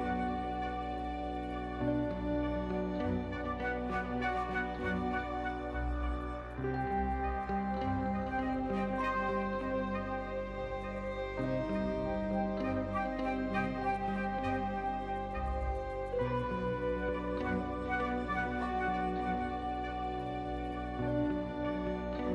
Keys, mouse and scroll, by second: 0.1 1, 0.4 click, 0.8 shift+s, 2.3 Tab, 3.0 shift+click, 3.5 shift+a, 7.7 Tab, 8.0 1, 9.4 Tab, 9.6 g, 11.7 Tab, 11.9 1, 12.5 e, 14.0 a, 14.8 shift+n, 15.5 2, 16.4 ctrl+z, 16.4 Tab, 16.4 2, 18.5 2, 19.0 click, 20.0 ctrl+alt+click.